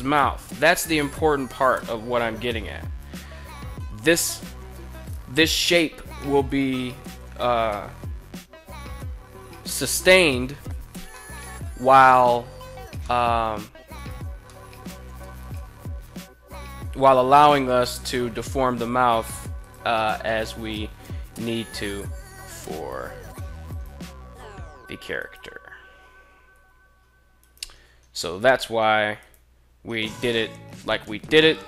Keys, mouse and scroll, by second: 1.3 alt+h, 2.4 right click, 3.9 Tab, 6.1 right click, 6.7 g, 8.1 z, 9.3 right click, 10.6 middle click, 12.5 middle click, 13.5 right click, 14.0 middle click, 15.0 right click, 15.6 KP_3, 16.7 g, 19.1 click, 20.0 KP_1, 22.2 right click, 23.2 right click, 24.6 right click, 26.2 g, 26.9 right click, 28.7 shift+right click, 30.7 s, 31.3 x.